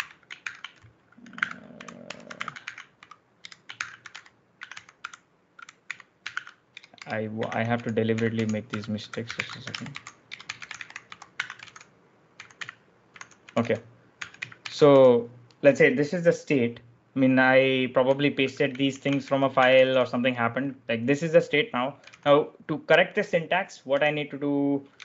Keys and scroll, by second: 0.0-15.3 typing, 17.7-19.6 typing, 21.6-22.4 typing, 23.8 j.